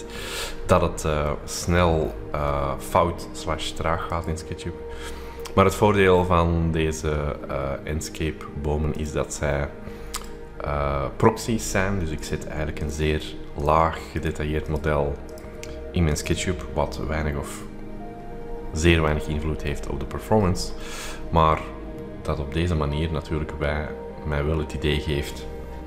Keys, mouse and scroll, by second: 0.0-1.6 middle drag, 0.0-0.4 scroll down 2, 0.4-1.6 scroll up 2, 1.6-2.7 scroll down 2, 1.8 middle click, 2.2 middle click, 2.7 shift+middle click, 2.9-3.6 shift+scroll up 3, 3.1 shift+middle click, 4.0 click, 5.1 middle click, 5.1-6.8 scroll down 4, 8.9 scroll, 9.0 click, 10.1 click, 12.2-16.9 drag, 19.2-20.0 scroll up 2, 20.0-20.8 scroll down 2, 20.8-23.7 scroll up 2, 23.7-24.4 scroll up 1, 24.4-25.2 scroll up 1, 24.5-25.8 middle drag, 25.2-25.8 scroll up 1.